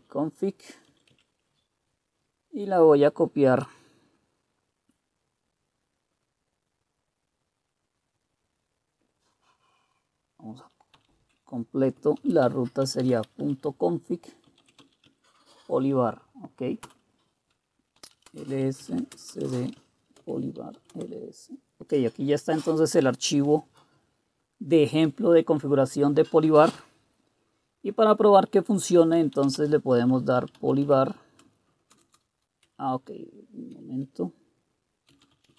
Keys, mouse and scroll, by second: 0.0-1.1 typing, 12.1-15.3 typing, 16.6-21.3 typing, 28.9-33.7 typing, 34.9-35.5 typing.